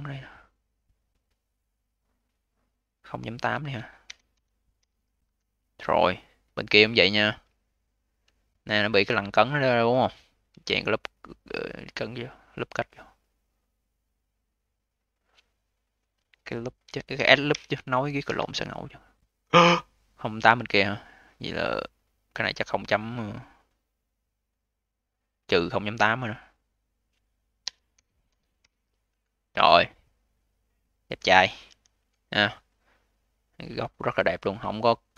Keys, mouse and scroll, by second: 3.1-6.0 drag, 6.0-6.5 scroll down 7, 6.5-7.0 alt+drag, 7.0-7.4 alt+middle drag, 7.4-8.2 scroll up 7, 8.2-9.0 alt+drag, 9.0-10.4 scroll up 2, 10.4 a, 14.9-18.0 drag, 21.2-24.3 drag, 26.4-29.5 drag, 31.5 v, 31.9-32.6 scroll down 6, 32.6 click, 33.0-33.7 scroll up 7, 33.7-35.1 alt+drag.